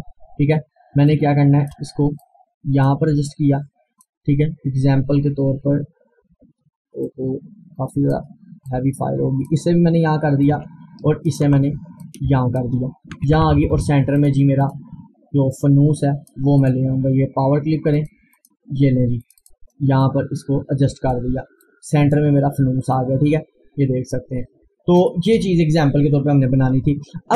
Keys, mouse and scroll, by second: 2.3-6.6 drag, 7.1-8.7 drag, 8.7-11.3 drag, 11.3 ctrl+right click, 12.1 click, 13.2 Right, 14.2 click, 16.6 right click, 18.0-25.0 drag, 25.6 scroll down 1.